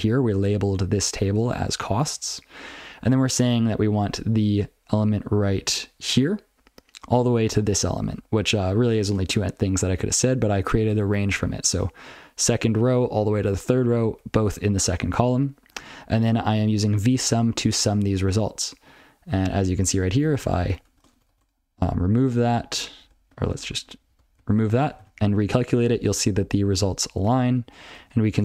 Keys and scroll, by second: 2.8 ctrl+f, 3.3 ctrl+f, 8.2 ctrl+f, 8.5 ctrl+f, 8.7 ctrl+f, 9.0 ctrl+f, 9.3 ctrl+f, 9.6 ctrl+f, 10.1 ctrl+f, 10.3 ctrl+b, 10.6 ctrl+b, 10.9 ctrl+f, 11.0 ctrl+b, 11.2 ctrl+f, 11.5 ctrl+b, 11.7 ctrl+b, 12.7 ctrl+f, 13.7 ctrl+f, 13.9 ctrl+f, 14.0 ctrl+f, 15.3 ctrl+b, 15.4 ctrl+f, 15.5-16.1 ctrl+b, 16.7 ctrl+f, 16.9 ctrl+f, 17.5 ctrl+f, 19.3 ctrl+p, 19.4 ctrl+p, 19.7 ctrl+n, 19.9 ctrl+n, 20.4 ctrl+c, 20.5 ctrl+a, 20.7 ctrl+p, 20.8 ctrl+p, 21.0 ctrl+space, 21.1 ctrl+n, 21.3 ctrl+n, 21.4 ctrl+w, 22.4 ctrl+/, 22.7 ctrl+p, 23.0 ctrl+p, 23.1 ctrl+f, 23.4 ctrl+f, 23.6 ctrl+alt+space, 23.8 ctrl+w, 24.1 ctrl+n, 24.4 ctrl+n, 25.0 ctrl+c, 25.9 ctrl+p, 26.1 ctrl+p, 26.5 ctrl+n, 26.7-27.0 ctrl+p, 27.2-27.5 ctrl+f, 27.8 ctrl+f, 27.9 ctrl+d.